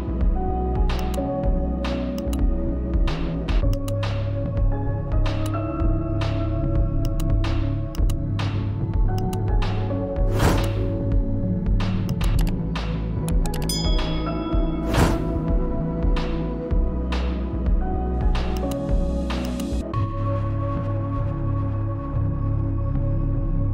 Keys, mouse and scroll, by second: 0.6 click, 1.0 typing, 7.9 click, 7.9 typing, 9.3-9.7 typing, 9.4 click, 15.4 right click, 19.7-23.7 drag.